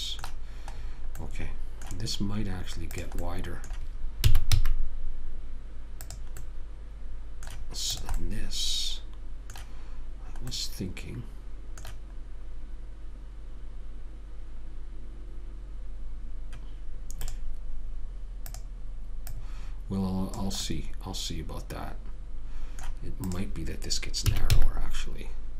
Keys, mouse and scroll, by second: 3.5 click, 4.6 s, 6.8-8.3 middle drag, 8.3 click, 10.9-17.5 middle drag, 17.5-20.9 right drag, 20.9 click, 23.7 click, 24.6 s.